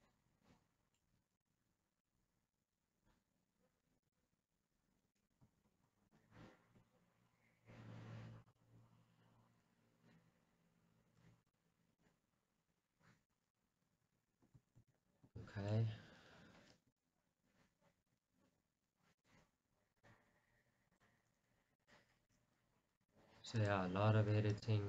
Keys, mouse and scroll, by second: 1.5 g, 4.2-5.7 drag, 6.9 r, 8.8-9.9 right drag, 9.9 g, 11.7 click, 11.8 scroll down 1, 12.0 scroll down 1, 12.1-14.5 middle drag, 17.1-18.1 middle drag, 18.1 r, 19.3 click, 19.4 middle click, 20.0-21.2 drag.